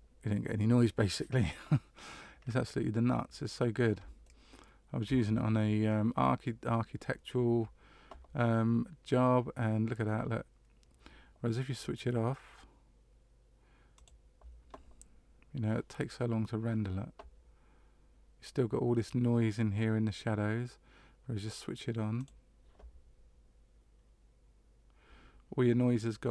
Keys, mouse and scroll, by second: 2.3-4.0 scroll up 2, 4.2 shift+middle click, 14.0 click, 22.3 click.